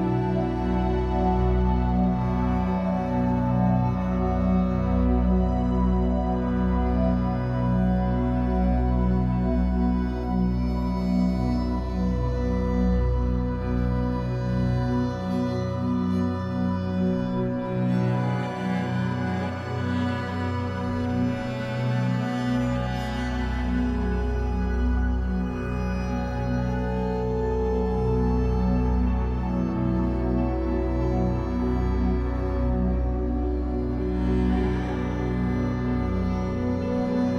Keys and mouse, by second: 1.3 ctrl+alt+right click, 2.1 ctrl+alt+click, 2.4 ctrl+alt+right click, 2.6 ctrl+alt+click, 3.1 right click, 3.2-4.4 drag, 4.3 typing, 4.9 click, 5.8 click, 7.2-10.3 drag, 11.2-12.1 typing, 11.6 click, 13.0-14.2 drag, 14.8 alt+r, 16.0 click, 18.4 click, 21.1 space, 22.6 ctrl+s, 23.5 click, 23.9 click, 24.6 ctrl+alt+click, 26.0 ctrl+s, 27.3 ctrl+alt+click, 28.5-33.9 drag, 34.0 space.